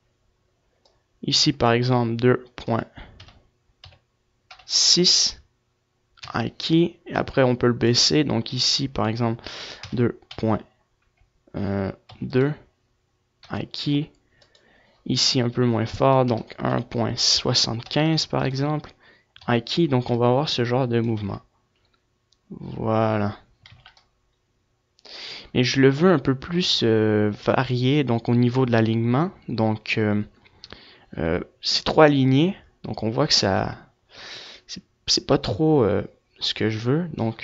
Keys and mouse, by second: 0.0-4.2 drag, 1.7 typing, 5.8 typing, 6.7-13.3 drag, 13.3 i, 14.0-19.1 drag, 19.4 i, 20.1 click, 21.0 alt+a, 23.4 alt+a, 23.7-26.5 drag, 30.9-32.6 drag, 36.3-37.4 drag.